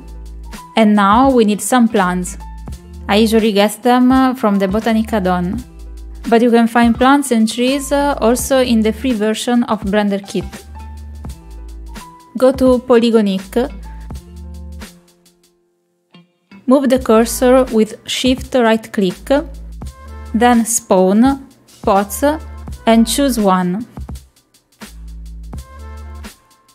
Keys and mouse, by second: 2.1 click, 6.5 click, 14.2 click, 15.2 middle click, 16.4 shift+middle click, 16.8 shift+middle click, 21.5 shift+right click, 22.6-26.7 drag.